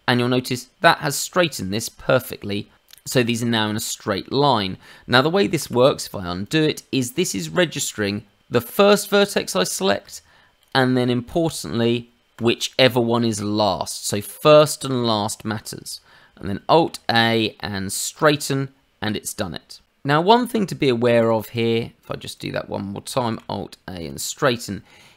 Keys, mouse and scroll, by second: 1.0 click, 5.6 ctrl+z, 6.4 click, 7.1 middle click, 8.4 click, 10.5 shift+click, 11.2 shift+click, 12.3 shift+click, 16.8 alt+a, 20.2 click, 21.1 shift+click, 21.5 shift+click, 21.9 shift+click, 22.3 click, 23.2 alt+a.